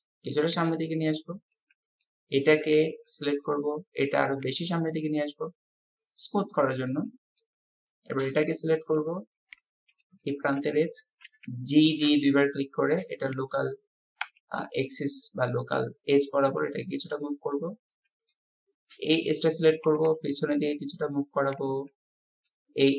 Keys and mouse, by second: 0.5-1.6 drag, 1.8-2.2 drag, 2.8 click, 3.1-3.5 drag, 6.0-6.6 middle drag, 6.6-6.9 drag, 6.9 middle click, 7.1 click, 7.5-8.6 middle drag, 10.3 shift+click, 11.2 g, 14.3 KP_7, 16.4 typing, 16.6 click, 17.3 middle click, 18.1 click, 19.0 click, 19.8 g, 21.9 click.